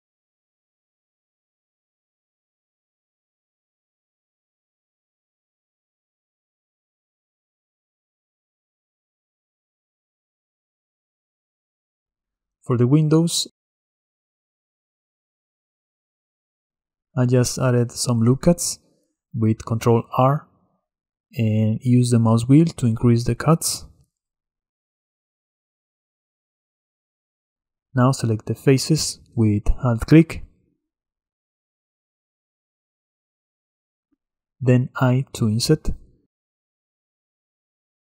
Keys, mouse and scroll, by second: 0.4-2.1 drag, 6.4 middle click, 6.8-7.2 scroll up 2, 7.2-7.9 drag, 7.9 ctrl+b, 10.4-10.8 scroll down 2, 10.8-14.0 middle drag, 14.0 scroll up 2, 14.2-14.8 shift+middle drag, 14.8 ctrl+z, 15.5 Tab, 16.7 ctrl+r, 24.6-28.7 drag, 30.5 alt+shift+click, 32.5 alt+shift+click, 33.1 alt+shift+click, 33.5 middle click, 33.8-35.3 scroll up 1, 35.3 i.